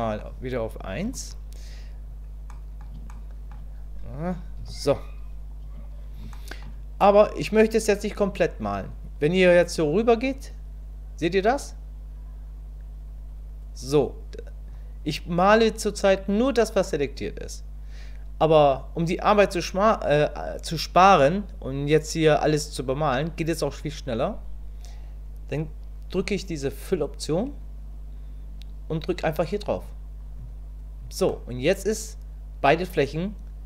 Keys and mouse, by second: 0.0 middle click, 1.1 KP_1, 2.5 click, 3.1 click, 4.6 KP_1, 6.4 shift+click, 10.3-14.7 drag, 21.0-22.9 drag, 31.3-33.6 middle drag.